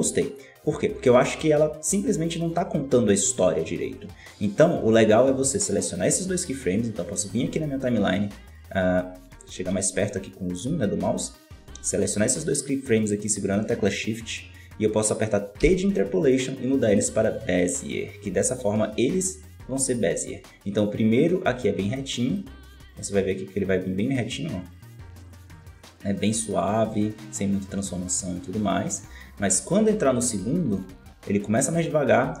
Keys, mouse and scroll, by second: 0.8 scroll down 6, 4.5-6.8 right drag, 6.8-7.3 scroll up 4, 7.8 right click, 8.8 right click, 9.1-9.7 scroll up 14, 10.4-10.8 right drag, 10.8-11.5 scroll down 17, 12.8 shift+right click, 15.5 t, 19.5-22.5 drag, 22.8-27.7 drag.